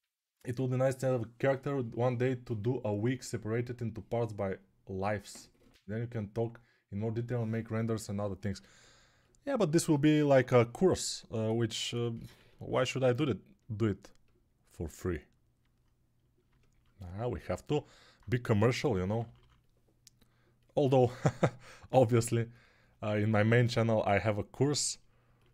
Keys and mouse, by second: 10.1 1, 17.7 alt+q, 18.4-19.2 typing.